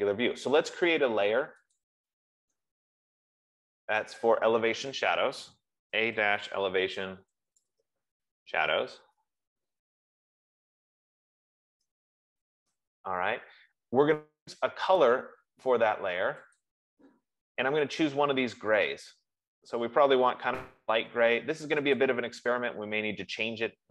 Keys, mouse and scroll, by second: 2.1 click, 4.6 click, 6.6-13.0 typing, 16.0 click, 17.6 click, 22.3 click.